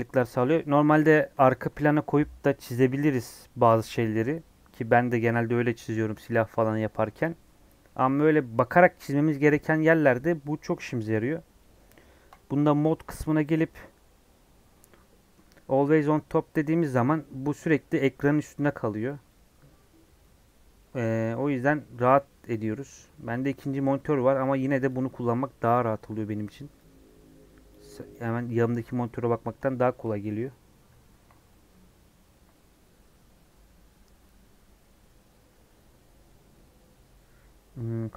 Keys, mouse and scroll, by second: 0.0 scroll down 1, 0.1-1.3 middle drag, 1.3 KP_1.